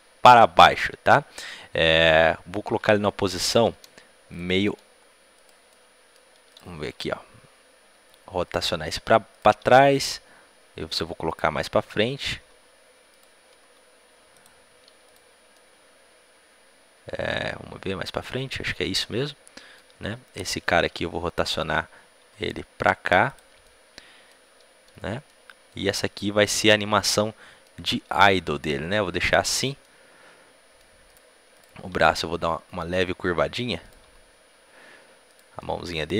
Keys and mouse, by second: 2.5-4.7 middle drag, 4.3-7.2 right drag, 4.4 g, 5.6 middle click, 6.7 r, 9.3-11.2 right drag, 9.5 r, 12.2 g, 13.5 g, 13.9-15.5 right drag, 15.0 click, 16.4 right click, 16.8 middle click, 20.4-23.2 right drag, 20.7 r, 22.2 r, 23.5-25.2 drag, 25.2-31.5 middle drag, 31.0-36.1 right drag, 31.8 r, 34.0 r, 35.5-36.1 middle drag.